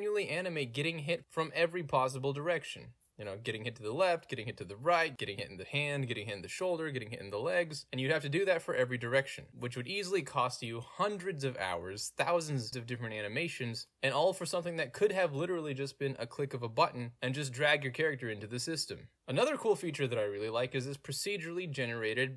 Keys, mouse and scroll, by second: 0.1 click, 2.1 middle click, 2.4 End, 3.1 r, 4.9 Escape, 5.0 g, 5.7 Escape, 5.9 click, 6.9 click, 7.0 g, 7.5 Escape, 8.1 click, 8.8 g, 12.9 Escape, 14.0 click, 15.4 click, 15.8 click, 16.6 click, 17.1 click, 17.7 click, 18.1 click, 18.5 d, 18.8 click, 20.4 d, 20.5 s, 21.6 w.